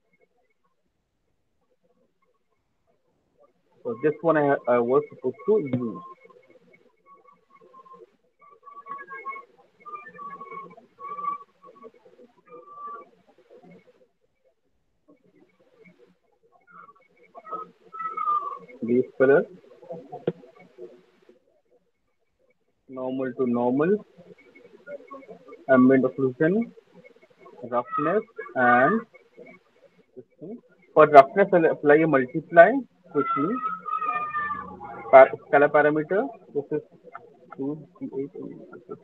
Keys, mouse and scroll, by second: 4.8 ctrl+click, 5.3 ctrl+click, 10.7 click, 12.4 right click, 13.3 scroll, 15.0 Delete, 15.8 click, 16.6 click, 17.7 click, 19.3 click, 21.7 click, 22.3 click, 24.9 click, 26.3 click, 28.4 click, 31.4 click, 32.0 right click, 32.0 middle click, 32.5 click, 32.5 m, 35.3 click, 36.6 click, 36.6 s, 37.9-39.0 typing.